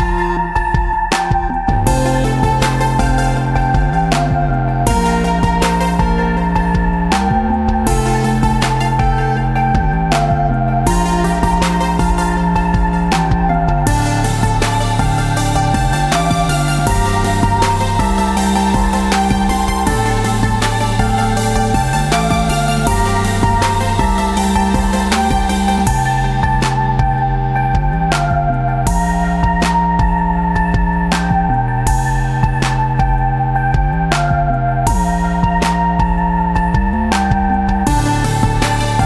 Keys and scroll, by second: 2.2 ctrl+d, 2.6 ctrl+d, 2.9 ctrl+d, 3.3 ctrl+d, 3.7 ctrl+d, 4.0 ctrl+d, 4.3 ctrl+d, 5.4 ctrl+-, 6.5-9.6 typing, 11.6 ctrl+0, 12.3 ctrl+v, 13.0 ctrl+space, 13.5 space, 14.0 v, 18.3 space, 18.6 space, 19.6 ctrl+-, 20.5-25.3 typing, 22.3 ctrl+d, 27.8 v, 34.0 ctrl+s.